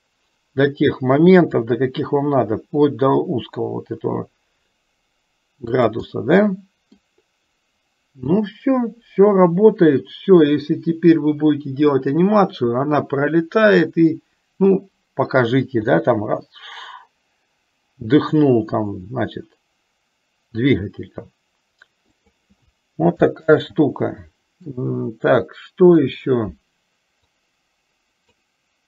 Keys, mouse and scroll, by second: 6.3 middle click, 8.5-10.9 middle drag, 11.0-12.1 middle drag, 16.0 s, 23.5 ctrl+z, 25.5 middle click, 27.5 click.